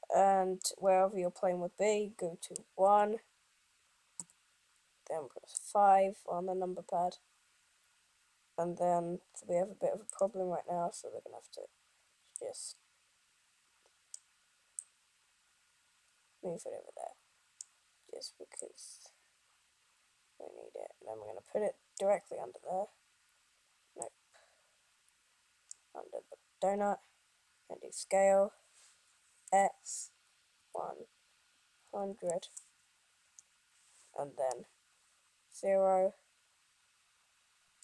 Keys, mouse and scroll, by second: 1.7 middle click.